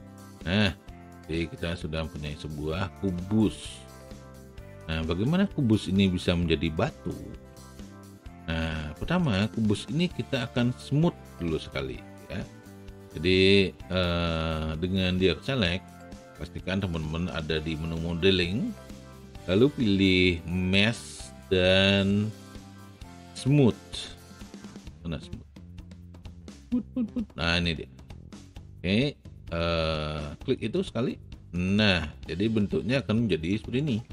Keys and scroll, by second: 5.1 r.